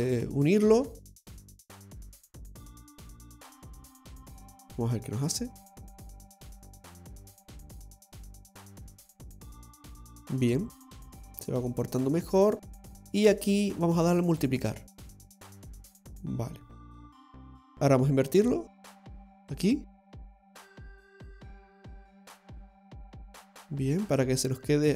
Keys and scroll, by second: 13.0 typing.